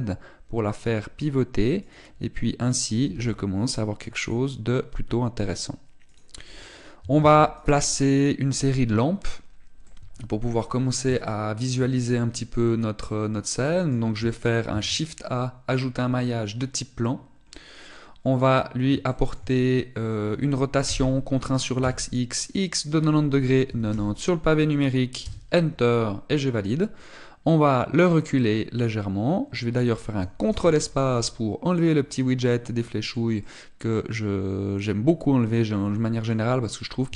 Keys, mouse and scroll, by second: 2.7 click, 3.9 g, 5.1 click, 6.3 click, 7.9 ctrl+s, 10.6 middle click, 11.6-12.0 scroll down 2, 12.0 shift+middle click, 12.7 middle click, 15.5 shift+a, 18.3 middle click, 19.9 shift+middle click, 20.3-21.3 scroll up 3, 21.7 r, 27.7 click, 31.3 ctrl+space, 32.9 middle click, 34.2 middle click.